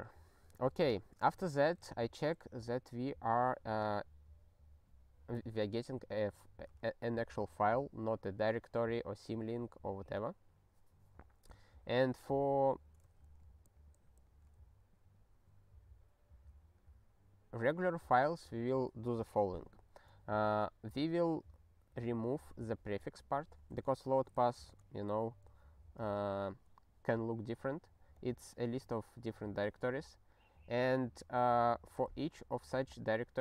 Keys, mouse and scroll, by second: 0.9 ctrl+a, 1.4 ctrl+alt+@, 2.0 ctrl+g, 11.9 ctrl+n, 12.5 ctrl+p, 13.2 alt+f, 13.6 alt+f, 14.2 alt+f, 17.7 ctrl+n, 21.6 click, 24.1 click, 24.5 ctrl+b, 24.7 ctrl+e.